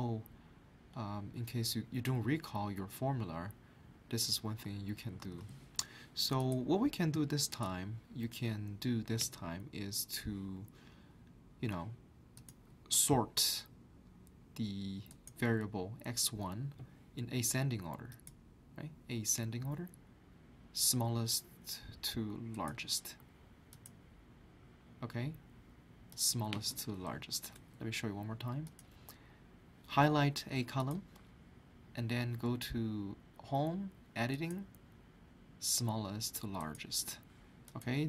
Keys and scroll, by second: 5.2 alt+Tab, 27.3 ctrl+z.